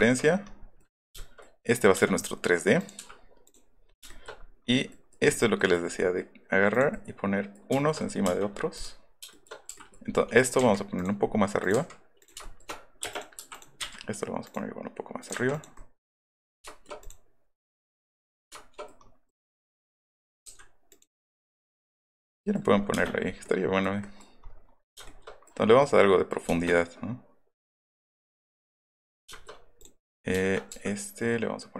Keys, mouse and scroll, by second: 1.9 space, 2.8 click, 3.4 click, 4.1 shift+middle click, 5.0 middle click, 6.7 click, 7.5 shift+middle click, 8.0 middle click, 8.2 middle click, 8.2 space, 8.3 middle click, 8.6 middle click, 8.8 middle click, 9.2 shift+middle click, 10.4 click, 11.2 middle click, 11.6 click, 11.7 Up, 12.5 shift+middle click, 13.1 click, 13.4 m, 13.5 click, 13.8 Up, 14.4 click, 15.2 click, 15.4 Up, 15.5 click, 15.7 middle click, 16.7 shift+middle click, 17.0 click, 17.8 click, 18.0 middle click, 20.2 click, 20.8 click, 21.4 click, 22.2 click, 22.4 middle click, 22.9 shift+click, 23.0 middle click, 23.2 middle click, 24.3 middle click, 24.6 middle click, 25.6 middle click, 29.7 click.